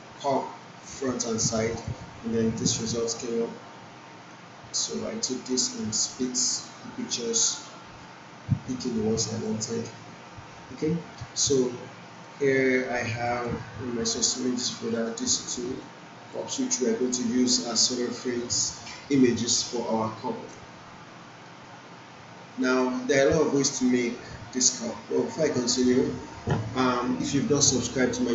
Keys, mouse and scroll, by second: 0.5-1.5 click, 2.4-2.7 scroll down 1, 4.1 click, 9.3 click, 12.6-16.3 drag, 20.5 right click, 21.2 click.